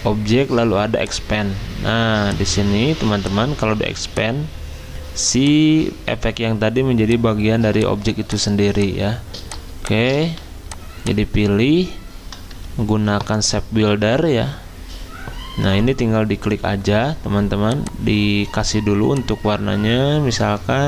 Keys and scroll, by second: 1.9 z, 10.2 v, 12.9 m.